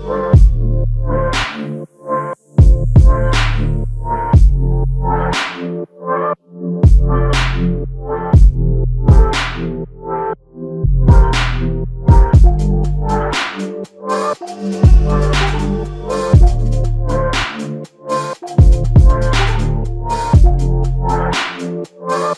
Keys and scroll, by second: 2.7 typing.